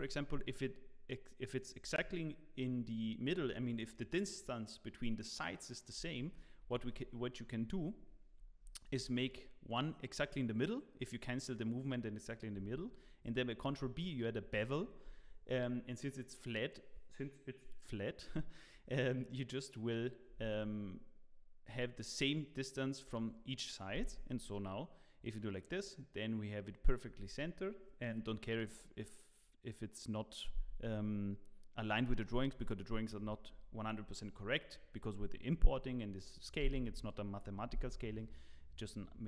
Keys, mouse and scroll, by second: 6.6 ctrl+z, 6.8 ctrl+z, 8.0 ctrl+z, 8.8 ctrl+r, 13.6 ctrl+b.